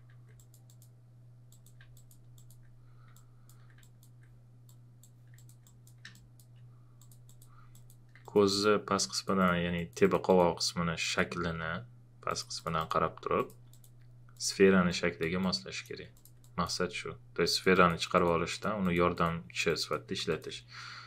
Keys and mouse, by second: 0.4 click, 1.9 alt+click, 3.1-16.1 alt+drag, 20.3 alt+click.